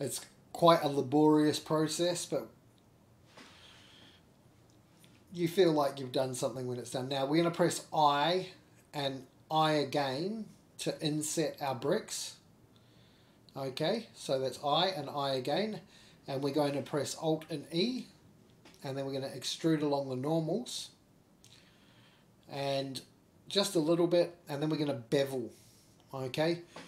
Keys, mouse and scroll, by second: 0.2-1.2 scroll down 4, 0.4 k, 0.5 shift+middle click, 0.5 k, 2.6 shift+middle click, 2.6 scroll down 2, 3.1 shift+middle click, 3.2 ctrl+z, 3.2 x, 3.3 k, 3.3 3, 3.7 ctrl+click, 3.9 ctrl+click, 4.4-6.4 ctrl+drag, 6.7-8.6 ctrl+drag, 8.7 shift+click, 8.9 ctrl+z, 9.5 k, 11.5 3, 11.7 shift+click, 12.0 middle click, 12.1 scroll down 3, 12.2 middle click, 12.4 shift+middle click, 12.9 i, 13.0 shift+click, 13.0 scroll down 2, 13.0 3, 13.3 shift+middle click, 13.9 middle click, 14.7 i, 19.5 middle click, 20.8 middle click, 23.3 alt+e.